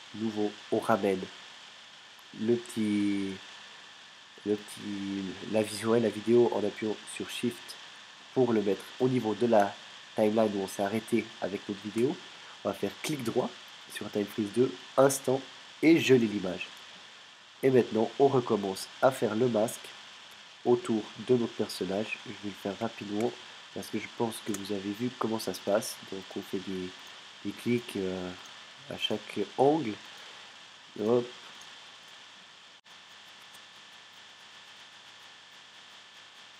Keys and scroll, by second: 23.2 alt+space, 33.3 space.